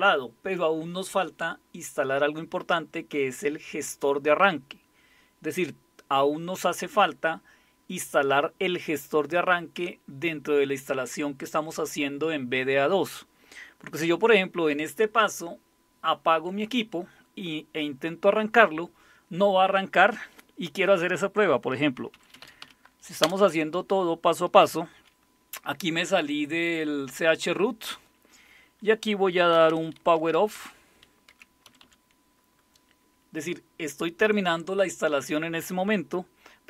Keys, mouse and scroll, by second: 21.9-23.2 typing, 29.3-32.3 typing.